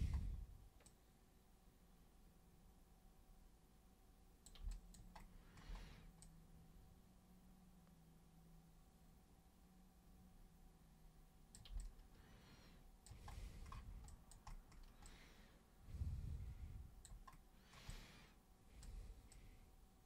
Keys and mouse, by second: 0.8-4.4 super+drag, 4.7 alt+super+click, 6.2-11.5 super+drag, 11.7-13.0 alt+super+drag, 14.1 alt+super+click, 15.0-17.0 alt+super+drag, 17.9 alt+super+click, 19.3 super+click.